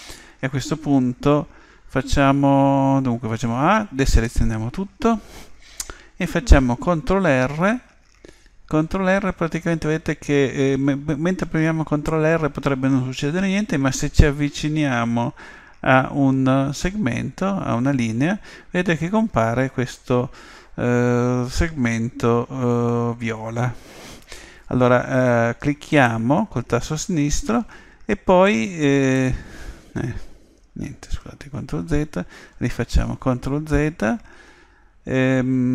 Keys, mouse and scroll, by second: 3.4 a, 7.6 ctrl+r, 31.0 ctrl+z, 33.0 ctrl+r.